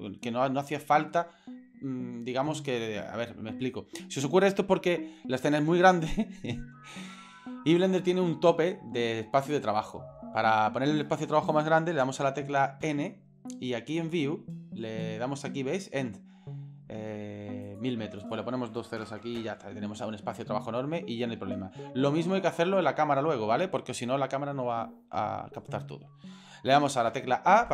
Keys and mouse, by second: 12.8 n, 17.7-19.4 drag, 19.2 KP_0, 21.5-22.1 shift+middle drag, 23.2-23.5 shift+middle drag, 27.1 a.